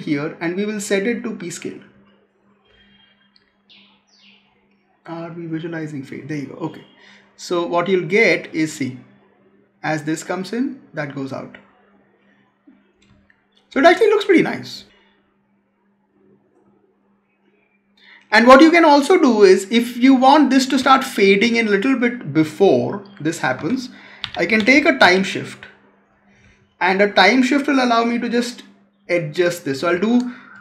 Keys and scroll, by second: 13.0 space, 20.7 space, 23.4 Tab.